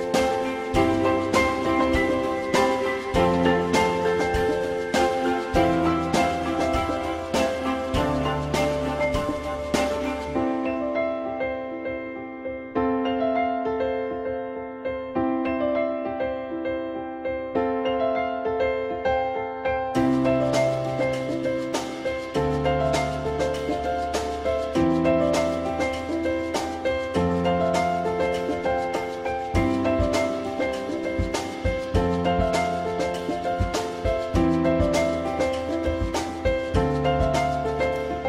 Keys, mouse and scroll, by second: 14.4 F4, 15.4 alt+middle click, 27.6 alt+middle click, 29.1 q, 31.9 alt+middle click, 36.7 alt+middle click.